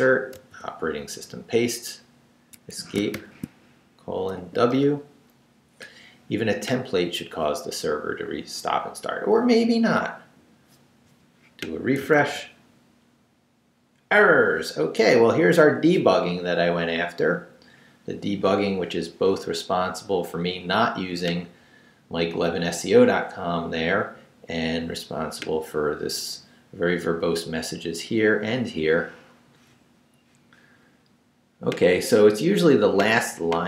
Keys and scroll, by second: 0.3 super+v, 2.5 Escape, 3.1 shift+;, 4.4 shift+w, 4.7 Return, 12.2 super+r.